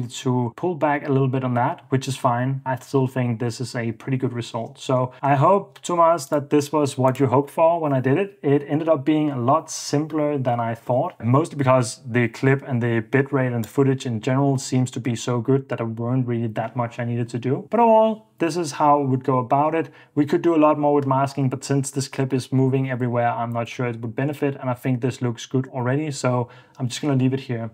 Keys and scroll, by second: 5.7 super+Tab.